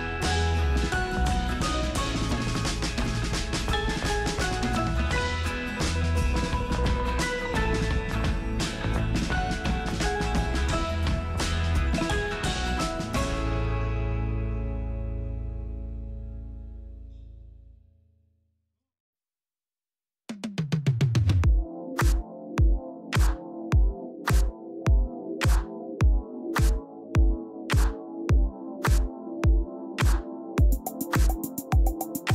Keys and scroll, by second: 24.4 space, 25.3 alt+space.